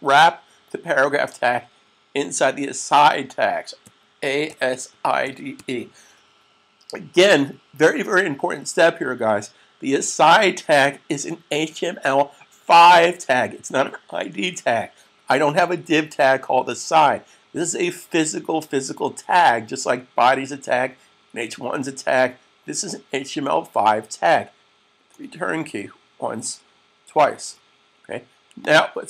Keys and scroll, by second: 3.6-5.8 typing.